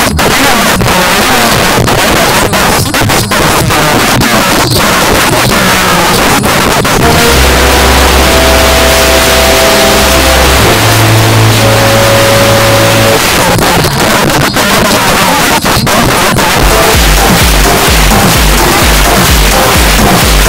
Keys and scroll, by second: 13.2 Page_Down.